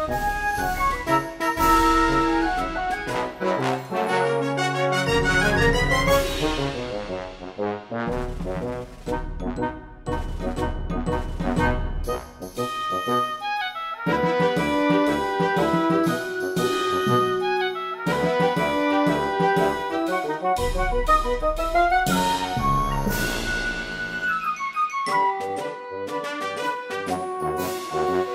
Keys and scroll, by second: 1.1 space, 8.2 space.